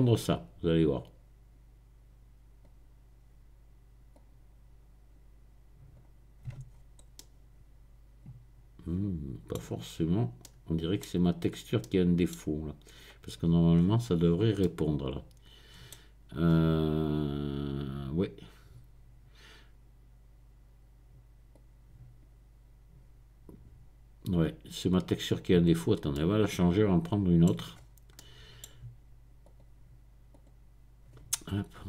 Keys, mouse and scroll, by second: 0.3-3.2 drag, 4.1-6.2 drag, 6.7-7.2 scroll down 1, 7.2-9.6 middle drag, 9.9-10.4 scroll up 1, 13.7-14.6 scroll down 1, 16.5-17.3 scroll up 1, 21.5-25.7 drag, 25.7-26.1 scroll down 1, 27.7-28.6 scroll up 1, 29.4 click, 30.3 click, 31.5-31.8 scroll down 4.